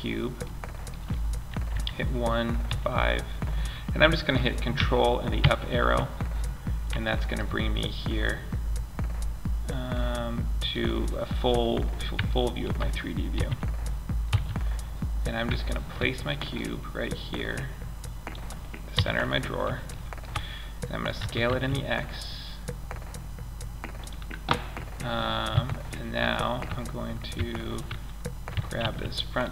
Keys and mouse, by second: 1.0 KP_1, 2.0 KP_5, 4.7 ctrl+Up, 7.0-8.9 drag, 12.6 KP_3, 13.6 z, 16.0-16.8 middle drag, 18.2 KP_1, 19.2 middle click, 20.5 s, 24.8 KP_3, 26.7 Tab, 27.8 a, 28.3 b.